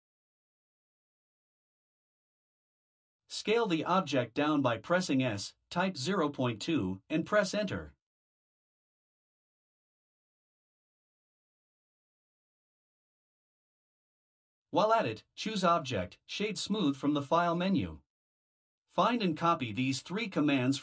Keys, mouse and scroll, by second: 3.6 s, 10.7-11.4 scroll up 1, 11.4-12.0 scroll up 1, 12.0-12.4 scroll up 1, 12.6 click, 14.1 click, 17.0 right click.